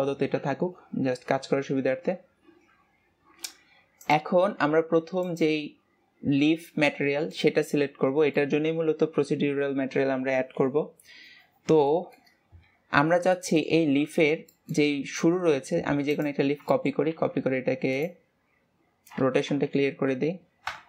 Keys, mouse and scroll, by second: 4.1 click, 13.3-13.8 middle drag, 13.8-14.1 scroll up 2, 14.1-14.9 shift+middle drag, 14.9-15.3 scroll up 1, 15.3-16.1 scroll down 2, 16.2 click, 16.4 scroll down 2, 16.6-17.1 shift+middle drag, 17.1 shift+d, 18.3-19.7 scroll down 1, 19.7 alt+r.